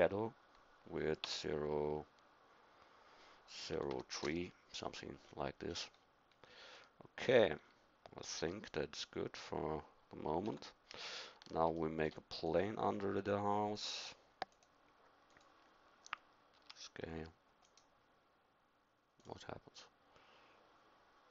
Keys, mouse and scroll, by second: 5.3-8.5 middle drag, 10.4 KP_7, 16.6 s, 19.8-21.3 drag.